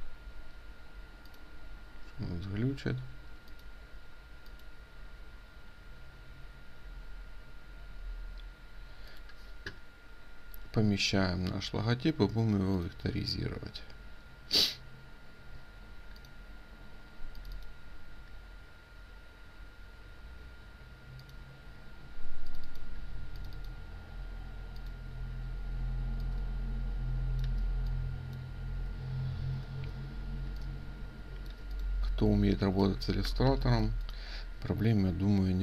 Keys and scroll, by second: 33.4 ctrl+2, 33.7 ctrl+space.